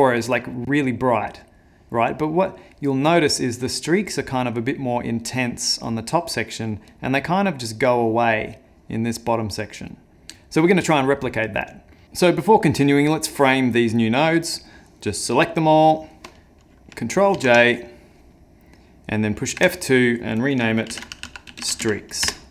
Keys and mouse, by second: 10.1 middle click, 11.9 middle click.